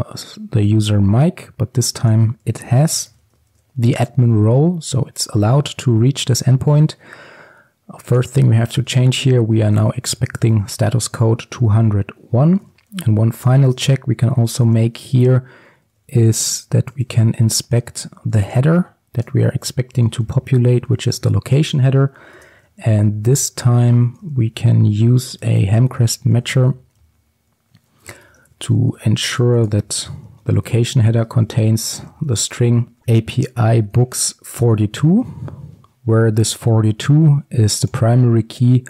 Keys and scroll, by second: 3.6 ctrl+s, 13.6 Tab, 19.3 Return, 28.3 Return.